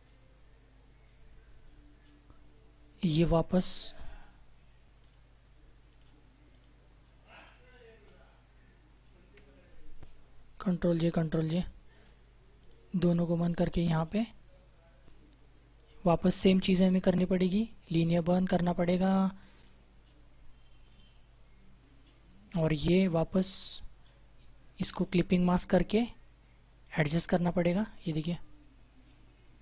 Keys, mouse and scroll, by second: 4.9 alt+click, 10.5 ctrl+j, 12.5 click, 15.7 click, 24.8 click.